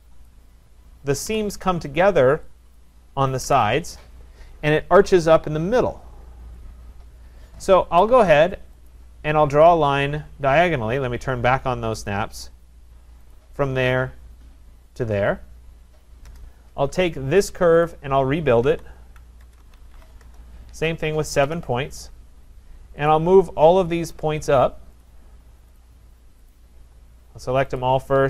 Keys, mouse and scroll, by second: 0.3 click, 1.3 Delete, 2.8 click, 3.4 Delete, 8.9 click, 12.1 click, 13.3 click, 15.0 click, 16.3 Return, 17.9 click, 18.4-21.8 typing, 23.1 click, 24.2 shift+click, 25.0 shift+click, 25.8 click, 26.6 click, 28.1 shift+click.